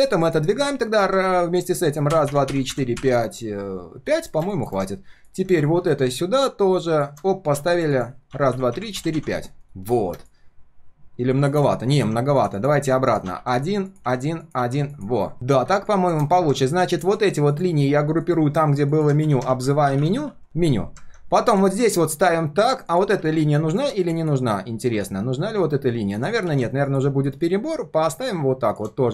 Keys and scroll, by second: 9.9 ctrl+shift+4, 19.2 ctrl+g, 19.5 ctrl+r, 20.4 ctrl+s, 26.5 ctrl+z.